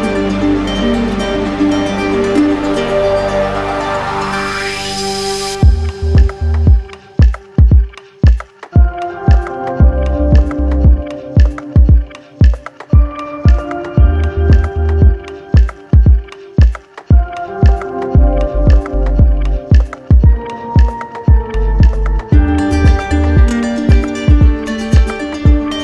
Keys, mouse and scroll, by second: 1.4 alt+click, 1.6 ctrl+z, 3.0 alt+click, 7.9 alt+click, 9.0 shift+click, 9.1 shift+click, 10.0 right click, 11.6 right click, 14.4 alt+click, 14.7 ctrl+z, 17.1 alt+click, 17.3 ctrl+z, 17.7 ctrl+z, 20.1 alt+click, 20.4 ctrl+z, 23.2 alt+click.